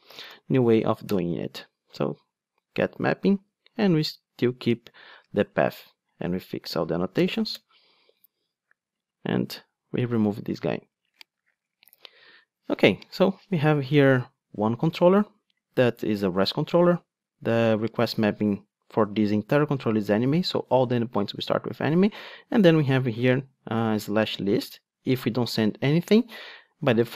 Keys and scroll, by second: 1.2 Return, 3.8 super+x, 7.1 alt+Return, 9.8 super+x, 11.8 alt+super+l.